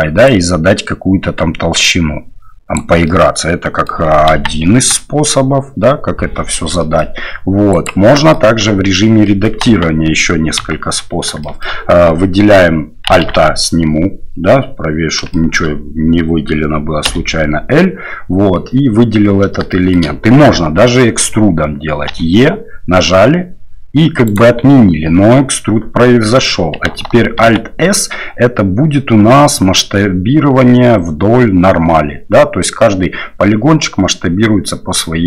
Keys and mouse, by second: 0.2-2.7 drag, 3.0 middle click, 4.2 KP_1, 4.7 KP_3, 6.8 middle click, 7.7 click, 8.1 middle click, 8.4 Tab, 9.2 click, 9.6 KP_1, 10.6 KP_3, 11.4 shift+click, 13.2 alt+a, 15.3 shift+click, 19.7 shift+click, 22.1 e, 27.4 alt+s.